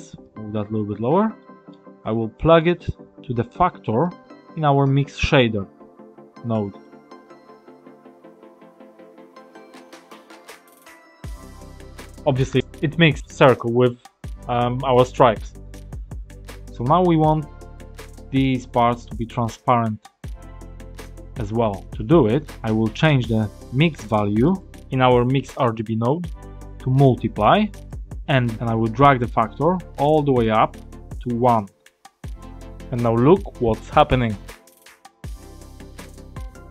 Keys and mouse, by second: 0.1 click, 1.3 middle click, 2.3 middle click, 3.9-6.7 drag, 8.6 click, 10.0 click, 23.5 click, 24.4-27.9 drag, 28.4 click, 30.2-36.7 drag.